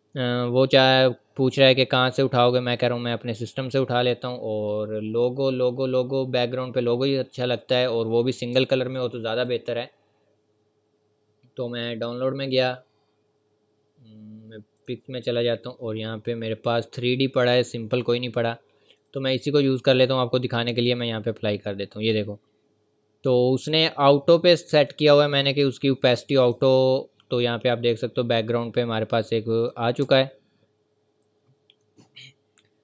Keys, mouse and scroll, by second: 2.8 click, 4.4 scroll up 1, 9.3 scroll up 1, 9.4 click, 14.7 click, 18.9 click, 24.8 click, 28.2-29.6 scroll down 1, 29.6 click, 30.1-30.5 scroll down 1, 31.3 ctrl+scroll down 1, 31.7-32.1 ctrl+scroll up 1.